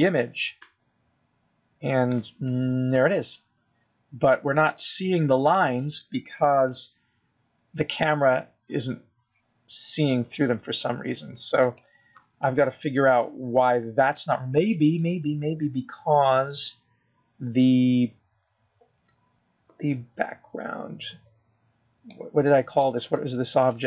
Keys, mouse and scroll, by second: 0.7 click, 15.2 scroll up 1, 15.7 scroll down 2, 17.4-18.1 scroll down 2, 18.1 scroll down 1, 18.6-21.1 scroll up 2, 21.1-21.6 scroll down 1, 21.6-22.9 scroll down 1, 22.9-23.4 scroll down 1, 23.4-23.8 scroll down 1.